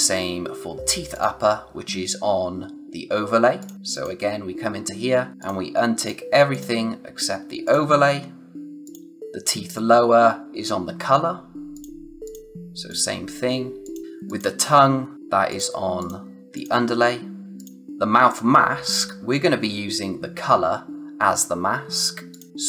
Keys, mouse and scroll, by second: 1.1 click, 3.5 click, 11.7 click, 15.4 click, 22.3 click.